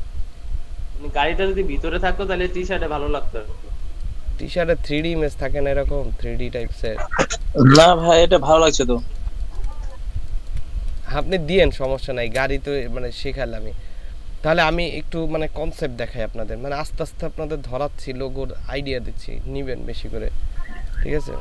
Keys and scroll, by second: 3.8 ctrl+space, 5.3 ctrl+space, 7.3 ctrl+space, 10.2 ctrl+space, 10.9 ctrl+space, 11.5 ctrl+space.